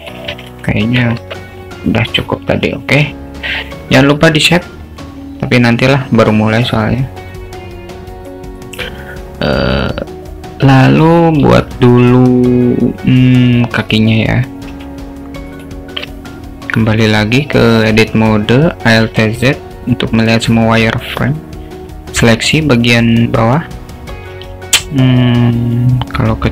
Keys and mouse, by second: 0.4 ctrl+z, 0.6 ctrl+z, 1.2 Tab, 2.6 ctrl+s, 16.9 Tab, 19.1 alt+z, 21.2-23.1 drag, 25.8 s.